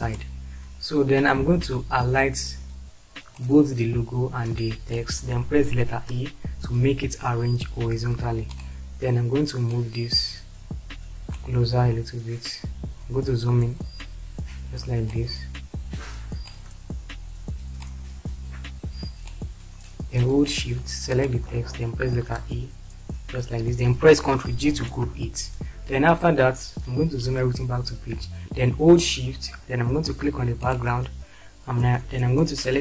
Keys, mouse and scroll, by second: 6.0 e, 22.2 shift+e, 24.7 ctrl+g, 27.1 shift+F4.